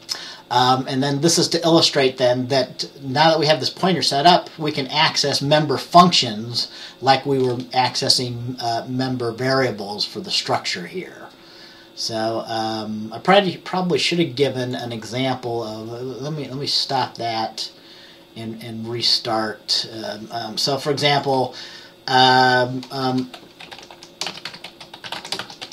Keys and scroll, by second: 23.2 Return, 23.5-25.7 typing.